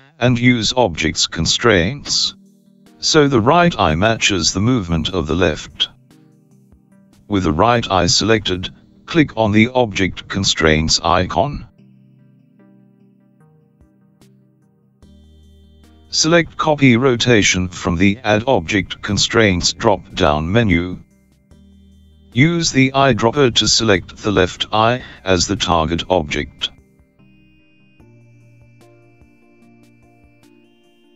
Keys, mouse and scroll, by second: 14.6 click, 16.9 click, 22.4 click, 27.3 click, 30.9 r.